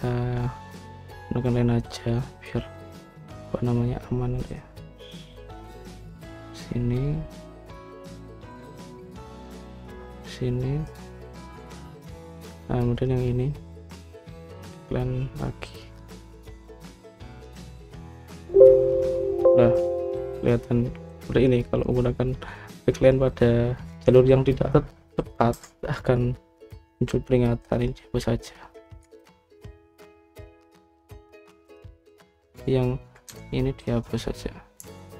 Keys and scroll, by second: 26.4 Escape, 30.1 ctrl+z, 34.2 Escape.